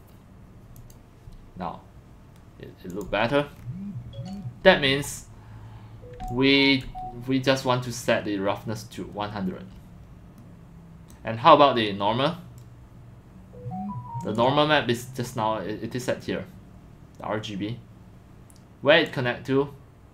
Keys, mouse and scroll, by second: 0.8 click, 2.9 click, 3.6-3.9 scroll, 4.2 scroll down 3, 4.7 middle click, 4.7 click, 5.1 click, 6.3-6.8 alt+drag, 9.3 scroll, 12.6 click, 14.4 click, 19.1-19.5 drag.